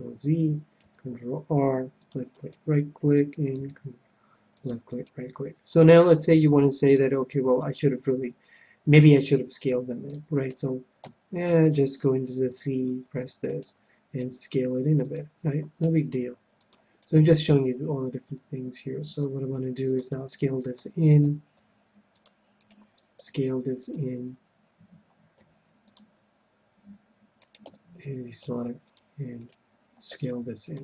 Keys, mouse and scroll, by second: 0.7 ctrl+r, 2.3-4.2 right drag, 3.5 ctrl+r, 5.1-6.8 right drag, 6.8-8.6 drag, 7.6-8.6 right drag, 8.7 right click, 8.9-11.8 middle drag, 11.0 a, 11.5 c, 13.5-15.3 right drag, 14.2 s, 15.1-16.8 drag, 15.8 a, 16.2 c, 17.1-18.9 right drag, 19.1 s, 19.9-21.6 drag, 20.3-22.1 middle drag, 21.2 a, 21.5 c, 22.6-24.5 right drag, 23.2 s, 23.8-25.6 drag, 25.3 c, 27.4-29.3 right drag, 27.6 a, 28.4 c, 29.5-30.8 right drag, 30.3 s, 30.7-30.8 drag.